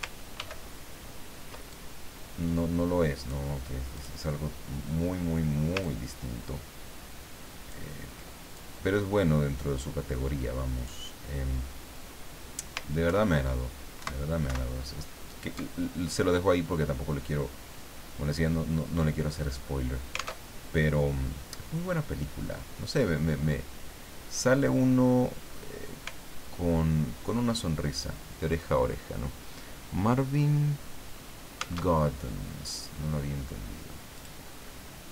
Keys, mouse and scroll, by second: 0.4 ctrl+d, 1.7-3.5 ctrl+drag, 4.0 click, 5.8-8.0 ctrl+drag, 8.5-11.0 ctrl+drag, 13.1 alt+Left, 14.0 alt+Right, 14.5 alt+Left, 16.3-16.7 scroll up 2, 20.4 alt+Tab, 31.8 alt+Tab, 34.2 click.